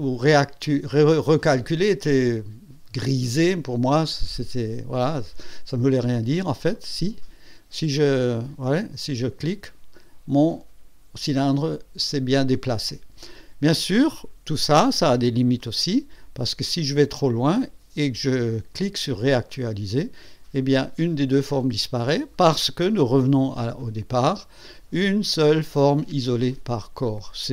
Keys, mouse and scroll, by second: 6.8 click, 7.2 click, 15.6 click, 16.2-17.0 scroll down 3, 16.5 middle click, 17.0-18.6 middle drag, 19.5 click, 23.8 click.